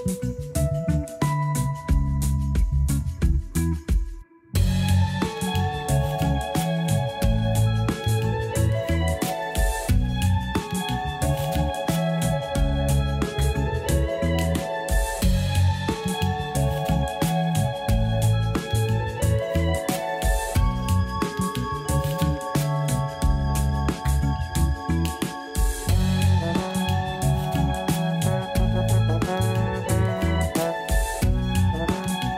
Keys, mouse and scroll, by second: 0.0 a, 0.2 a, 1.5 click, 2.2 a, 2.4 a, 3.0 scroll up 1, 5.5 click, 7.8 click, 13.3-16.3 drag, 17.6-20.1 drag, 20.1 a, 20.3 a, 20.4 scroll up 2, 21.1-21.8 shift+middle drag, 22.1 scroll up 1, 22.8 click, 28.3 click, 30.1 click, 31.2 click.